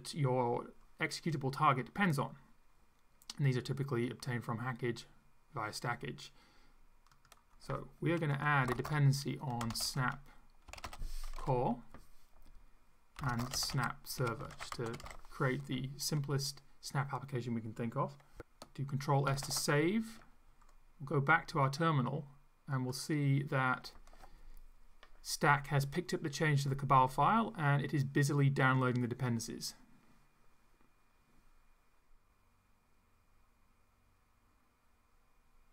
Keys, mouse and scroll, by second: 7.1 click, 8.7-15.6 typing, 19.3 ctrl+s, 21.6 click, 23.1 click.